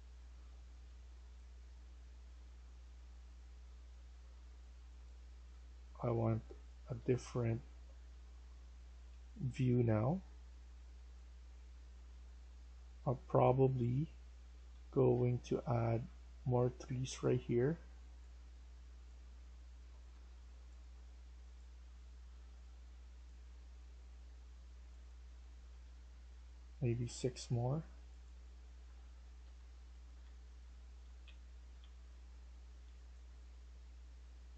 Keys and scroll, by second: 0.0-3.3 typing, 4.9 typing, 6.4-10.3 typing, 13.9-16.0 typing, 20.0 Escape, 20.2 Escape, 26.6 typing, 28.3-33.2 typing, 29.3 Escape, 33.9 ctrl+z.